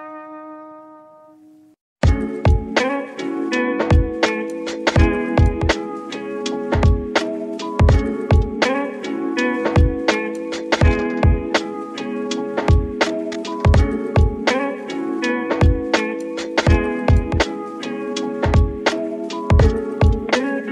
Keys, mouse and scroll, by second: 0.1 scroll down 2, 0.3-1.3 middle drag, 1.3 click, 1.6-2.1 scroll up 4, 1.9 shift+middle click, 2.1 Tab, 2.4-2.9 middle drag, 2.9 3, 3.2 click, 4.1 i, 5.0 click, 5.1 e, 8.0 click, 8.3-10.5 middle drag, 10.5 ctrl+r, 11.2 click, 12.2 ctrl+z, 12.9 ctrl+r, 15.0 right click, 15.4 alt+z, 16.0 ctrl+r, 16.7 click, 18.3 ctrl+r, 18.6 ctrl+click, 19.7 click, 20.0 scroll down 3, 20.2 Tab, 20.4 middle click.